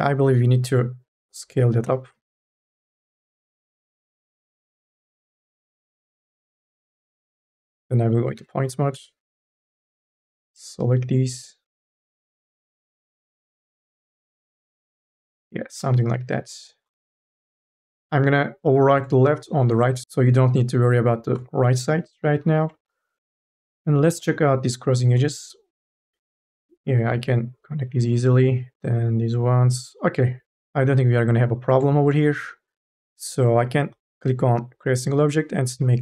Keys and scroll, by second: 1.7 4, 2.0 t, 8.2 1, 8.8 space, 9.7 KP_0, 13.6 ctrl+a, 22.0 4, 35.6 c.